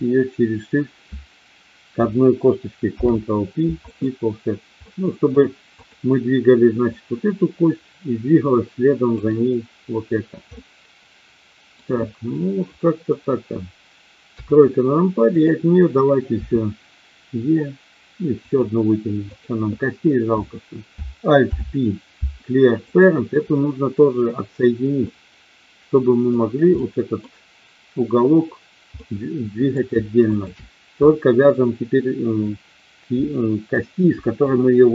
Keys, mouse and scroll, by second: 2.9 ctrl+p, 4.8 middle click, 5.8 click, 6.9-9.2 drag, 10.5-11.8 middle drag, 14.3 KP_3, 15.4 click, 16.4 e, 18.4 click, 19.3 click, 21.4 alt+p, 24.9-26.2 middle drag, 26.8 middle click, 28.9 middle click, 30.3 shift+click.